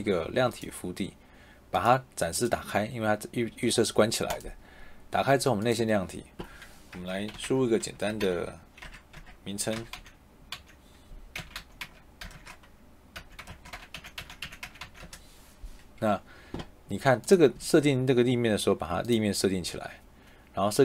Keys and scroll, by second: 6.9 Caps_Lock, 7.2-9.9 typing, 7.8 Caps_Lock, 11.3-14.7 typing, 14.9 Return.